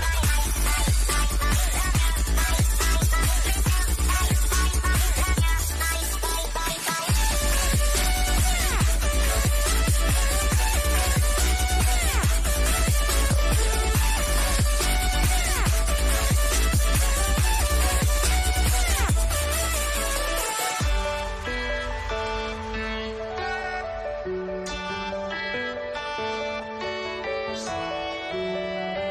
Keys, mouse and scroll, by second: 1.1 click, 5.3 scroll up 1, 6.9 click, 12.1 click, 18.6 click, 21.2 click, 21.7 scroll down 1, 22.7-26.2 shift+middle drag, 26.5 scroll up 1, 28.9 click.